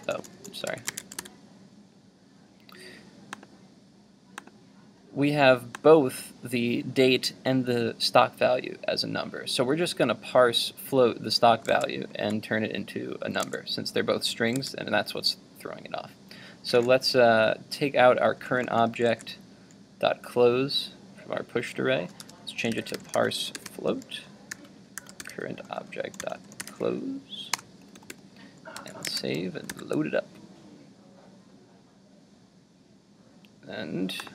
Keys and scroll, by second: 0.9 super+s, 1.0 super+Tab, 1.2 super+r, 11.7 super+Tab, 19.1 super+z, 28.8 super+s, 29.2 super+Tab, 29.7 super+r.